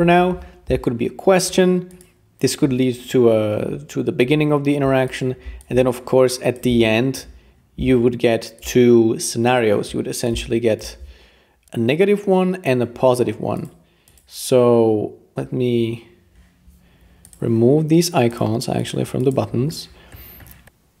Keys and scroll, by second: 0.8-1.3 typing.